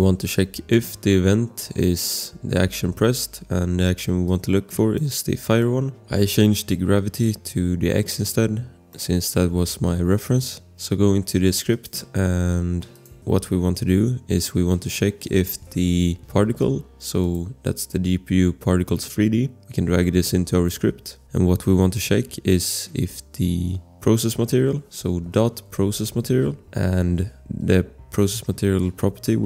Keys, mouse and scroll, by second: 0.0 click, 0.2 ctrl+v, 4.2 click, 5.8 click, 6.1 scroll, 8.9 click, 10.3 click, 11.7 click, 13.3 Return, 15.0-15.9 typing, 16.4 click, 17.2 click, 19.6 click, 25.4-26.7 typing.